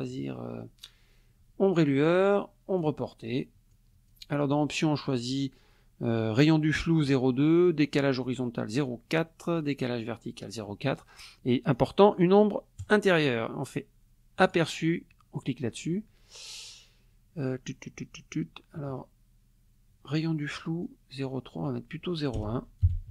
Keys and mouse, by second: 2.8 click, 3.7 click, 11.7 click, 12.8 click, 14.4 click, 21.2 click, 22.4 BackSpace, 22.8 KP_1.